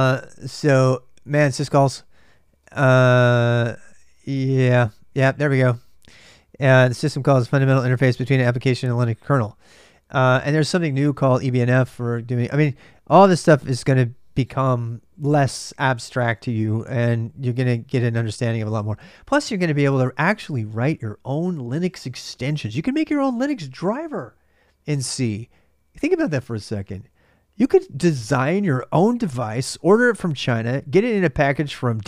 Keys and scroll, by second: 1.9-3.6 typing, 3.7 Return.